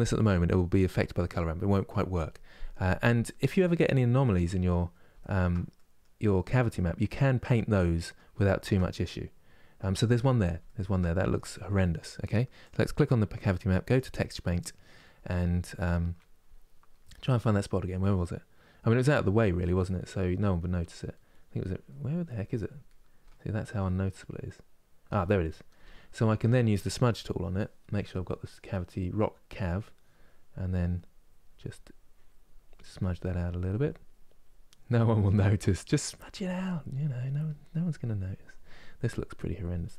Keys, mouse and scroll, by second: 3.1 scroll up 2, 3.6 middle click, 4.3-4.9 scroll up 1, 4.9-9.9 shift+middle drag, 9.9-10.3 scroll up 1, 10.3-12.3 shift+middle drag, 12.3-13.6 drag, 17.0-27.0 middle drag, 27.0-36.3 drag, 36.3 middle click, 36.9-39.9 drag.